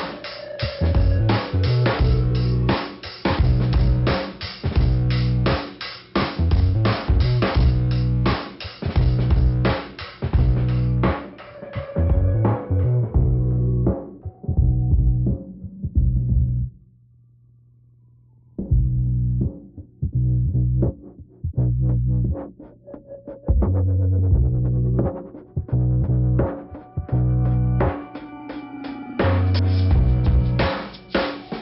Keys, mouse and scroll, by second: 0.7 click, 0.8 click, 4.3 click, 4.4 click, 4.5 click, 6.3 click, 6.5 click, 7.3 click, 7.4 click, 8.2 click, 8.3 click, 9.2 click, 9.3 click, 9.3 click, 9.4 click, 9.5 click, 9.6 double click, 10.6 double click, 10.7 double click, 11.7 click, 12.2 h, 12.5 Return, 12.8 Return, 14.3 click, 14.4 click, 15.7 click, 16.8 click, 16.9 click, 21.9-23.0 scroll down 1, 23.7 click, 25.2 click, 27.7 click, 27.8 click, 29.0 click, 29.1 click, 30.6 click, 30.7 click.